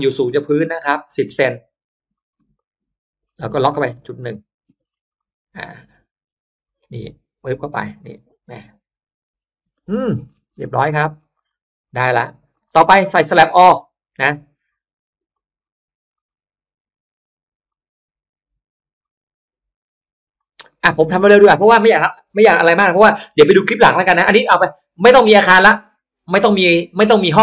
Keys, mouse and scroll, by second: 2.0 shift+click, 2.4 click, 3.1 middle click, 3.9 click, 4.6 space, 4.7-5.5 scroll up 1, 5.0-6.0 middle drag, 6.0-6.8 scroll down 2, 6.8 m, 7.4 click, 8.8 1, 9.4 Return, 9.6 space, 10.0 middle click, 10.3 space, 10.9 middle click, 11.2 drag, 11.8 click, 12.8 middle click, 12.9-13.2 scroll down 1, 15.2 click, 16.0 click, 17.6 click, 18.9 click, 19.9 click, 20.5-20.8 scroll up 1, 20.6 middle click, 21.0 scroll down 1.